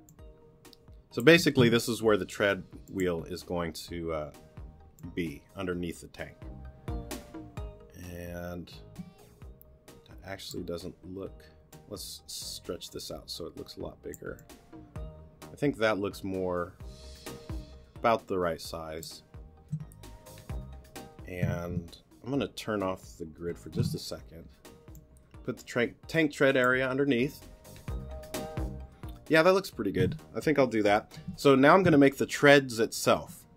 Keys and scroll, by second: 1.6 t, 23.5 super+g.